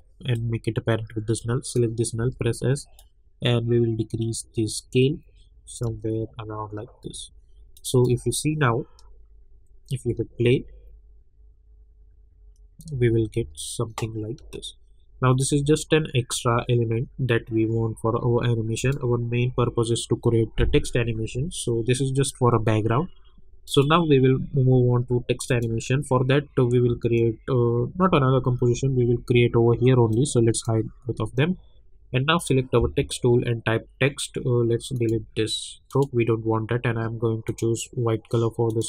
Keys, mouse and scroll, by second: 0.6-1.6 drag, 2.2 s, 3.0-5.8 drag, 5.8 space, 7.7 click, 8.1 space, 10.0 space, 12.9 space, 19.0 click, 19.5 u, 23.6 click, 30.1-32.4 drag, 34.9 click.